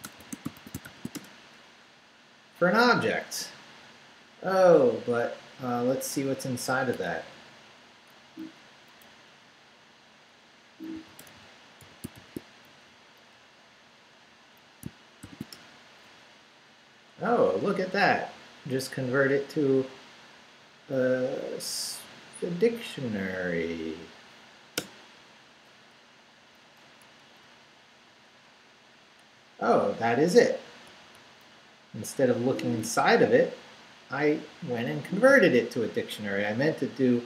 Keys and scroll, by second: 0.0-1.3 typing, 2.1 Return, 8.3 Down, 8.7 Up, 9.0 Left, 10.7-12.6 typing, 12.9 shift+Right, 13.4 Right, 15.2 shift+0, 15.5 shift+Return, 16.5 Return, 24.8 Return, 27.0 Up, 27.4 Left, 29.8 Left, 30.9 Right, 31.4 Left, 32.8 Right.